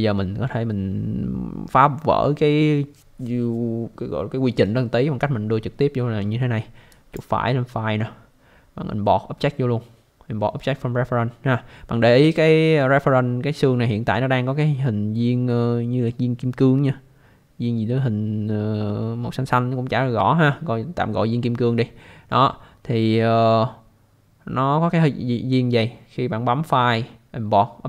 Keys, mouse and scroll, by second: 6.9 right click.